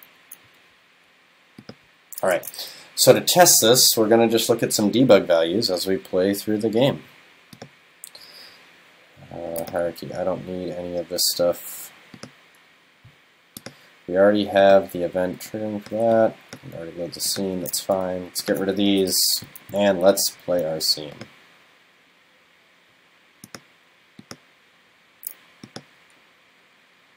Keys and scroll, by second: 3.7 super+s, 4.3 super+s, 19.1 super+BackSpace.